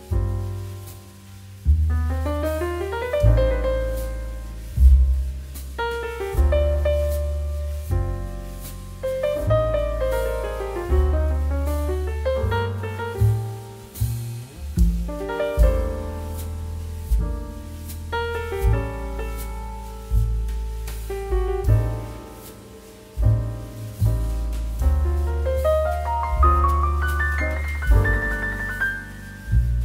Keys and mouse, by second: 5.9 click, 9.0 click, 9.5 right click, 9.7 click, 12.6 g, 13.0 shift+z, 14.5 z, 16.6 g, 17.1 shift+z, 18.4 click, 20.6 g, 21.5 click, 23.4 click, 27.9 right click, 28.1 click.